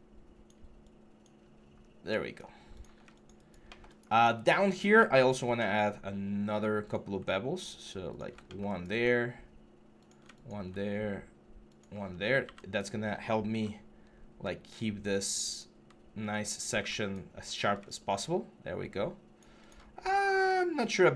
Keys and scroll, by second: 1.6 3, 11.9 3, 12.2 g, 13.3-13.8 typing, 16.3 3, 16.6 q.